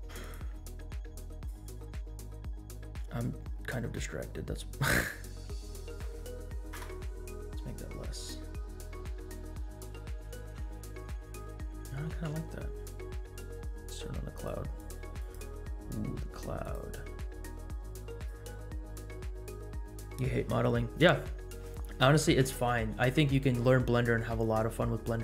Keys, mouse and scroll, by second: 0.2 click, 1.3 click, 2.3-3.5 scroll down 6, 3.8 scroll down 2, 5.8-7.0 drag, 7.8-9.1 scroll up 7, 9.1-10.4 scroll down 6, 10.4 space, 12.2 space, 13.8 scroll down 1, 14.4 click, 15.5 click, 16.6 click, 18.1 click, 22.4 space.